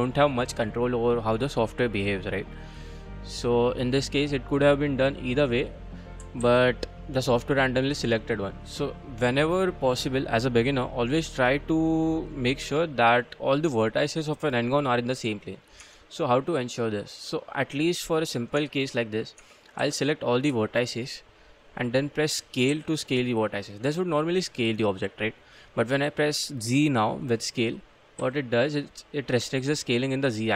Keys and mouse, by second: 0.9 middle click, 2.5-3.8 middle drag, 4.1 middle click, 5.2 middle click, 6.4 ctrl+z, 7.0-8.3 middle drag, 11.5 middle click, 12.6 Tab, 13.3-14.6 middle drag, 15.1 click, 15.8 Tab, 16.1-17.2 middle drag, 18.6 Tab, 18.9 click, 19.4 Tab, 19.8 1, 20.0 click, 20.7 shift+click, 21.2 shift+click, 21.6 shift+click, 22.1 click, 22.7 s, 28.2 z.